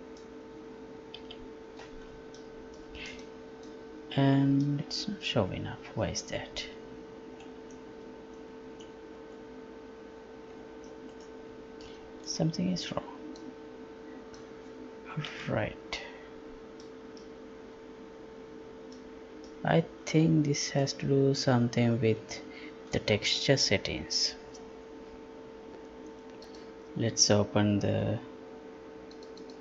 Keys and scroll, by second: 1.2 F11, 15.3 F11.